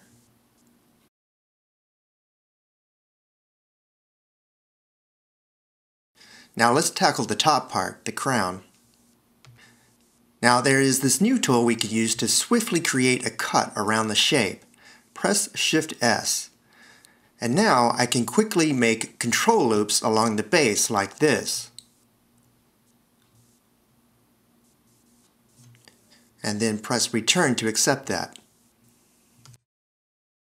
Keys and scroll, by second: 8.3 d, 13.2 s, 16.8 shift+s, 28.4 Return.